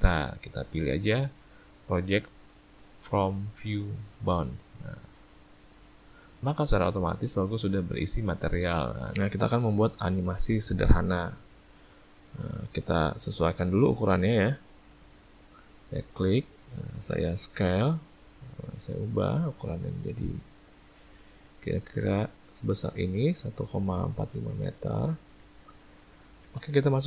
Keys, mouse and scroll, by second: 9.1 ctrl+middle click, 10.2 middle click, 11.9 shift+middle click, 12.8 ctrl+middle click, 13.3 click, 14.1 `, 15.3 ctrl+middle click, 15.5 ctrl+middle click, 16.1 ctrl+middle click, 16.4 ctrl+middle click, 17.5 s, 24.7 middle click, 25.3 a, 25.5 a, 25.6 middle click, 26.0 ctrl+middle click, 26.2 ctrl+middle click, 26.8 `.